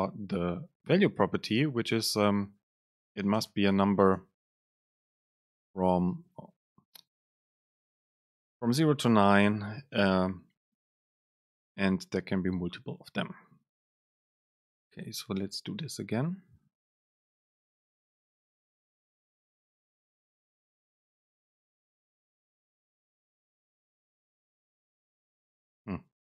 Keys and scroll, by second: 3.4 BackSpace, 11.6 Up, 11.8 Down, 15.0 shift+super+F9, 19.7 super+space.